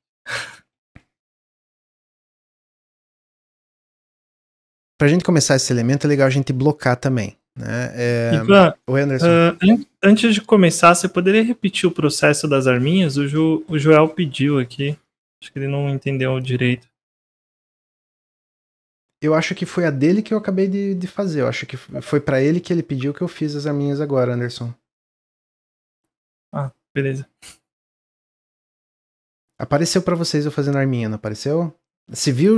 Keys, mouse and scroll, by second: 2.6-5.7 middle drag, 18.2 middle click, 18.6-19.2 scroll down 1, 25.7-28.8 middle drag.